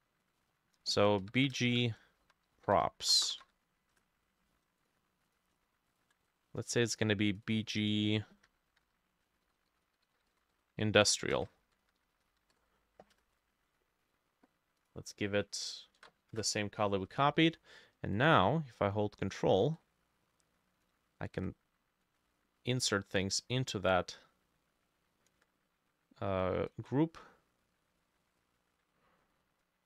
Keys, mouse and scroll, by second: 1.0 ctrl+a, 1.0-4.0 typing, 3.4 click, 4.0 Return, 5.3 double click, 6.0 shift+click, 7.5 double click, 7.9 double click, 8.7 Right, 8.9 Right, 9.3-11.3 typing, 10.0-13.2 drag, 11.1 shift+middle click, 11.6 ctrl+Left, 11.9 Right, 12.0 Right, 12.2 Right, 12.3 Right, 12.6 BackSpace, 13.2 Return, 16.0 ctrl+v, 16.4 Return, 22.3-25.7 ctrl+middle drag, 24.4-26.9 ctrl+drag, 26.9-29.1 ctrl+middle drag.